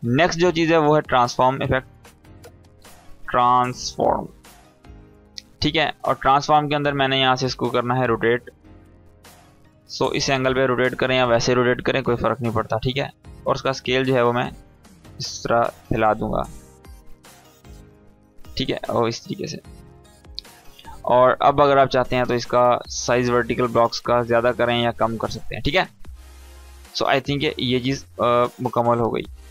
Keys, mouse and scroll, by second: 1.4-3.5 typing, 4.4 click, 5.5-7.4 scroll down 1, 8.1-12.4 drag, 22.4-24.3 drag, 24.7 ctrl+z, 26.0-26.6 drag.